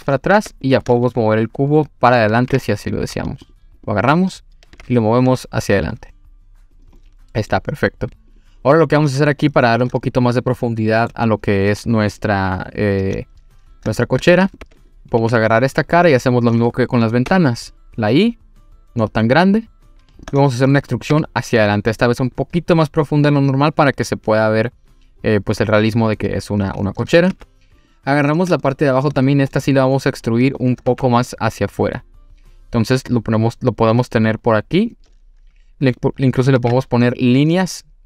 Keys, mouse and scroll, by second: 0.1 scroll down 1, 0.4 Tab, 0.6 click, 2.5 g, 2.5 y, 3.5 click, 3.8 click, 4.7 g, 4.7 y, 6.7 click, 7.0-7.5 middle drag, 8.3 click, 8.9-9.7 scroll up 2, 9.7-10.1 scroll up 1, 10.1-11.1 middle drag, 13.1 scroll down 1, 13.9 scroll down 1, 14.0-14.3 shift+middle drag, 14.5 click, 14.6 Tab, 14.8 click, 15.2 3, 15.3 click, 15.6-16.0 scroll up 1, 16.0 click, 16.6-17.2 scroll up 1, 17.3 i, 20.1 click, 20.4-20.8 middle drag, 21.1 e, 26.1 click, 26.4-26.9 scroll down 2, 26.9 middle click, 27.3 3, 27.8 click, 28.1-28.5 scroll up 2, 28.6-29.1 shift+middle drag, 29.3-30.2 scroll down 2, 29.5-30.2 middle drag, 30.9 e, 34.7 click, 36.6 ctrl+r.